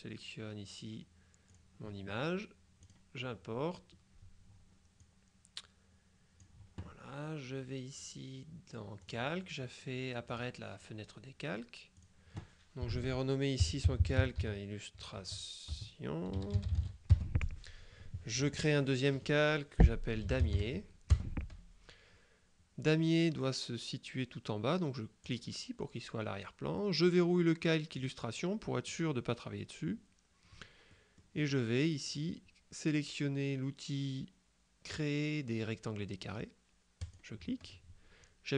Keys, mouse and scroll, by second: 1.6 click, 2.9 click, 5.1-7.0 drag, 9.1 click, 10.4 click, 12.0 click, 13.4-17.3 typing, 18.6 click, 20.0-21.1 typing, 21.2 Return, 25.3 click, 28.0 click, 31.0-32.1 drag, 37.1 click.